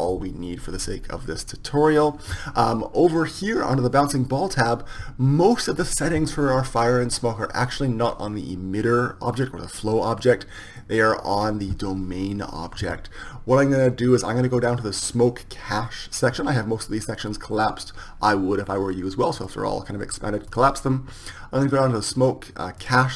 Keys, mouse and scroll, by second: 2.1-4.3 middle drag.